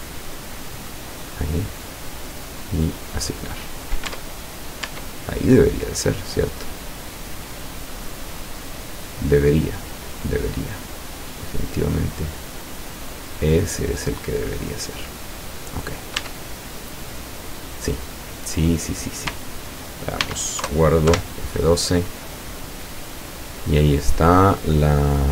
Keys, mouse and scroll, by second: 1.0 scroll up 1, 2.8 click, 4.1 Tab, 4.9 Tab, 8.9-15.8 middle drag, 15.8-16.2 scroll up 2, 16.2 Tab, 16.8-17.3 scroll down 2, 17.3-18.2 middle drag, 18.3-18.8 scroll up 2, 20.3 ctrl+s, 20.6 ctrl+KP_Enter, 21.1 ctrl+F12.